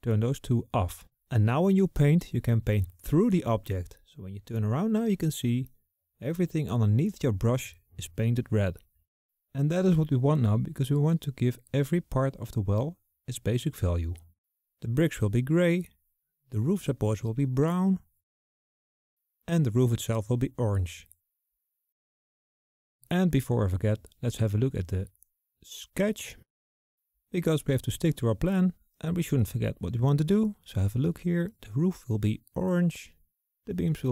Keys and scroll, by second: 13.0 ctrl+z.